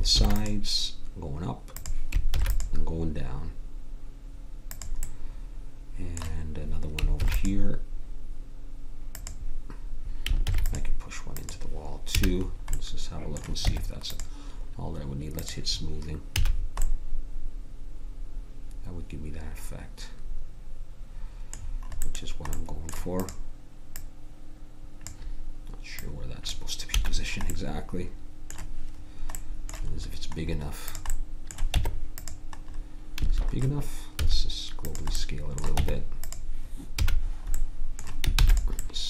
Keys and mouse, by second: 0.1 ctrl+r, 2.3 ctrl+r, 7.1 ctrl+r, 10.5 ctrl+r, 12.1 a, 13.6 Tab, 16.4 a, 21.6-23.9 middle drag, 23.9-25.9 drag, 27.0 a, 30.9-32.7 drag, 31.7 Tab, 33.2 a, 34.1 s, 35.7 Tab, 37.0 a, 38.4 ctrl+s.